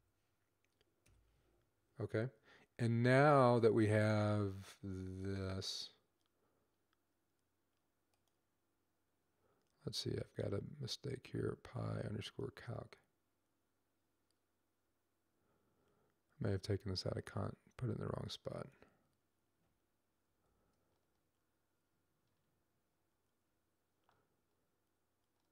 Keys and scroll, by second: 0.0-0.9 typing, 20.2 ctrl+x.